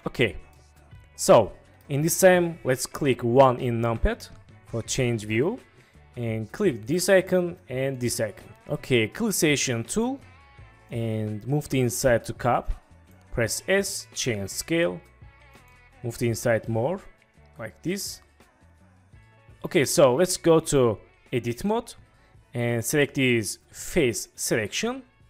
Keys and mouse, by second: 0.7-1.9 middle drag, 3.9 KP_1, 8.0 click, 9.7 click, 10.9 click, 13.6 s, 15.5 click, 20.5-21.7 drag, 23.1 click.